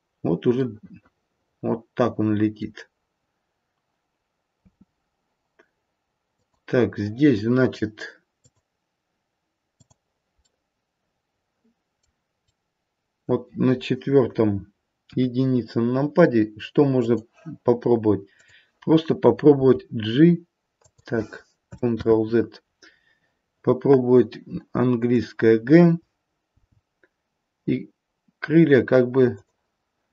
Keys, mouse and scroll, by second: 1.1 middle click, 4.6 space, 6.2 click, 8.3 click, 11.2 middle click, 12.7 middle click, 15.0 KP_1, 16.9 click, 18.2 click, 20.1 g, 22.0 ctrl+z, 26.4 g.